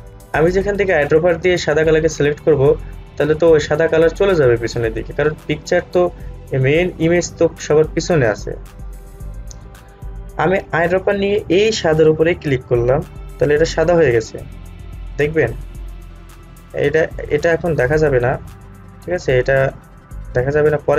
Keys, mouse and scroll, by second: 6.7-8.9 scroll down 1, 10.8 click, 16.0-16.9 scroll down 1.